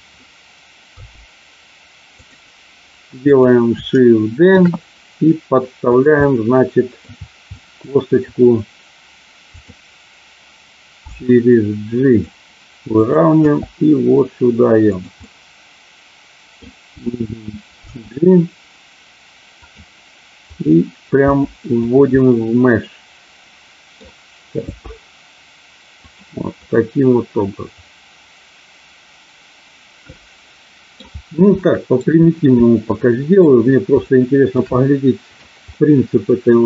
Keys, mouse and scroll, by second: 0.8 g, 2.1 click, 3.2 click, 4.5 shift+d, 5.8 click, 6.2 middle click, 7.5 middle click, 9.5 click, 11.0 g, 13.4 g, 14.9 click, 15.1-16.6 middle drag, 16.9 g, 17.9 g, 19.5 click, 21.2 g, 21.7 click, 22.2-24.0 middle drag, 26.0 click, 26.0 g, 26.7-31.0 middle drag, 31.6 shift+middle click, 33.0 middle click, 34.0 shift+middle click, 34.8 middle click, 35.8 middle click.